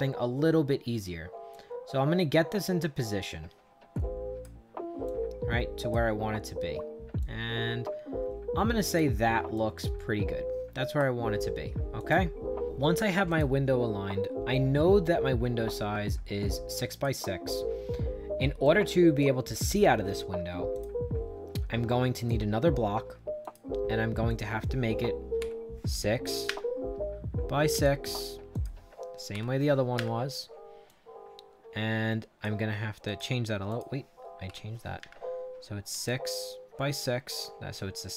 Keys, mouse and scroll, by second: 1.4-4.3 drag, 5.0 click, 7.1-8.9 drag, 9.5-10.9 drag, 11.9 click, 12.6 click, 13.2 click, 16.8 click, 18.5 right click, 20.6 click, 22.1 click, 23.3 click, 24.2 click, 25.3 6, 26.4 Return, 27.6 click, 28.4 click, 29.2 6, 29.9 Return, 30.8-32.3 drag, 33.0 click, 33.6 click, 34.4 6, 34.9 Return, 35.9 click, 36.8 click, 37.7-38.1 drag.